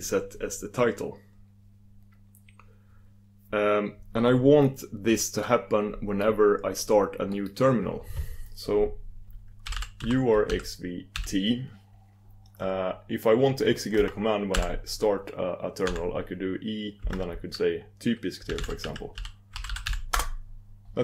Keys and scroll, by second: 20.3 ctrl+super+Return.